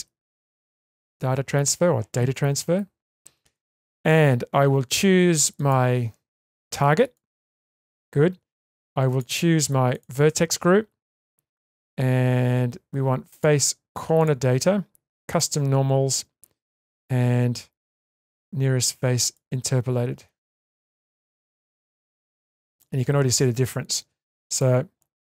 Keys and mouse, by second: 9.1 click, 13.3 click, 14.2 click, 15.3 click, 16.8-19.3 drag, 22.2 click, 22.7 click, 24.5 click.